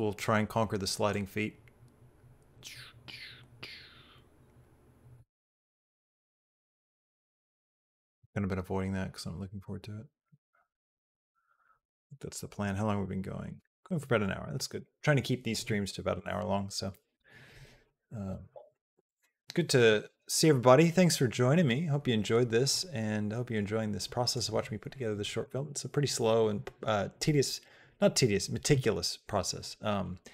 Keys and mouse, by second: 0.9-12.4 drag, 22.6-24.2 drag.